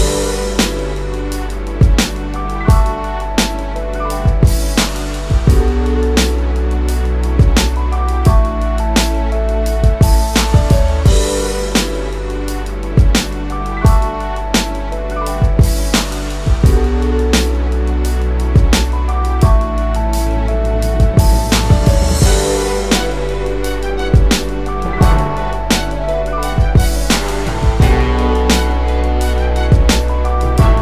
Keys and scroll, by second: 0.0-0.4 typing, 4.9 Down, 4.9 Down, 5.9 space, 6.3-7.0 space, 7.6 2, 13.6 space, 15.6-16.0 Up, 16.6 Up, 17.0 space, 19.0 space, 19.2 space, 19.5 Down, 19.6 Down.